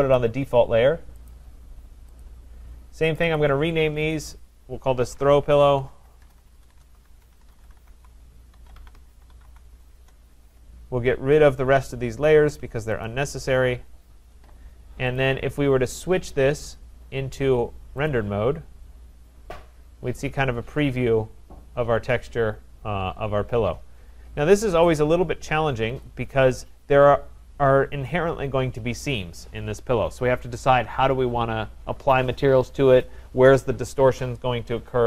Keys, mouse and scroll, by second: 0.2 click, 1.3 click, 3.2 click, 3.9 click, 4.9 click, 4.9-9.9 typing, 6.8 Caps_Lock, 10.0 Return, 11.5 click, 12.3 shift+click, 12.8-13.6 typing, 13.1 click, 15.2 click, 16.7 click, 18.1 click, 20.0-20.7 scroll, 21.3-21.7 scroll, 23.6-24.2 scroll, 24.2-25.3 scroll, 25.3 scroll, 26.1 click.